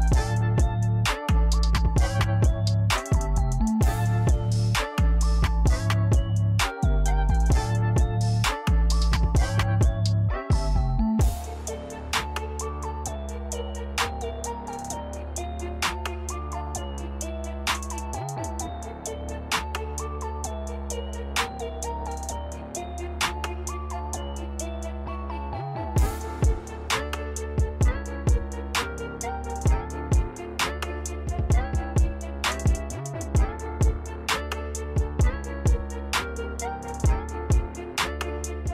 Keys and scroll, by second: 6.3-7.7 typing, 6.9 Tab, 14.7-16.2 typing, 26.9 typing, 28.8 typing, 32.2-33.2 typing, 34.5-37.2 typing.